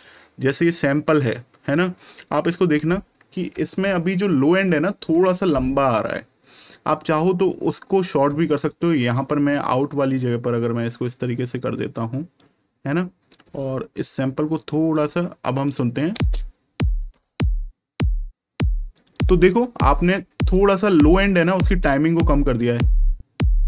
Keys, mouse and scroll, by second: 1.2 click, 3.9-4.7 ctrl+scroll up 1, 9.1 click, 14.1 click, 16.0 space, 18.9 click.